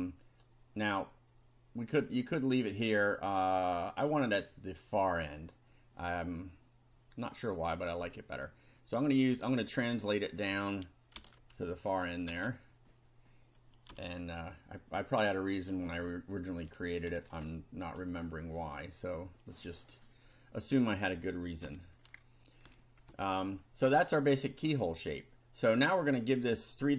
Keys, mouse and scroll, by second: 0.0 click, 7.4 click, 9.1-10.6 drag, 11.1 ctrl+c, 11.9 ctrl+click, 12.3 ctrl+v, 13.9 F5, 14.5-16.2 drag, 16.7 shift+click, 17.5 shift+right click, 18.1 click, 20.8 click, 21.6 Delete, 22.7 Up, 23.1 Down, 26.7 click.